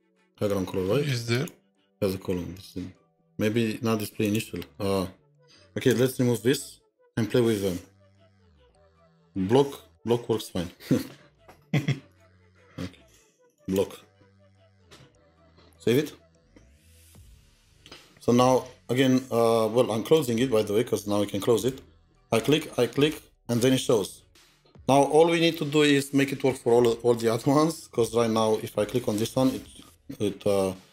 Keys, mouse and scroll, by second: 3.3 double click, 3.4 scroll up 2, 5.9 scroll up 2, 6.0 BackSpace, 7.7 Down, 13.5 Down, 13.5 double click, 13.6 double click, 14.4-15.6 typing, 18.2 scroll up 1, 19.0 typing, 23.7 typing, 23.7-25.7 scroll down 2, 28.0 scroll down 1, 28.1 scroll up 1.